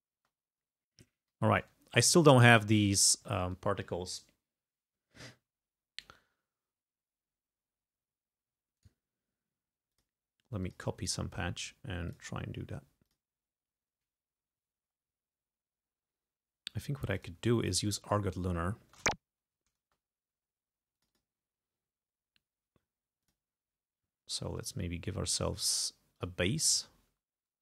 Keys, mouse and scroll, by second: 0.3 space, 1.4 g, 8.8 right click, 10.0 click, 10.6 click, 11.0 right click, 12.1 click, 13.1 click, 17.2 click, 18.1 click, 18.6 scroll down 2, 18.9 space, 19.3 ctrl+scroll up 2, 19.9 ctrl+space, 21.0 click, 23.3 click, 26.3 click, 27.1 space.